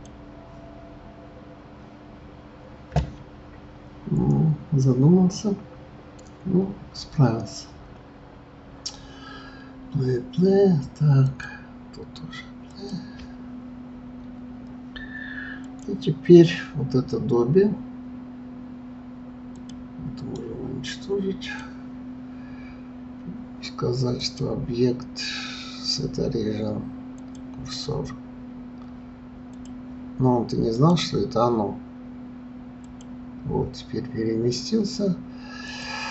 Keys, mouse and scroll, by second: 11.2 click, 12.7 click, 15.6 click, 19.5 click, 20.2-23.2 right drag, 24.2-27.2 drag, 29.5 click, 30.7-33.7 drag, 35.7 click.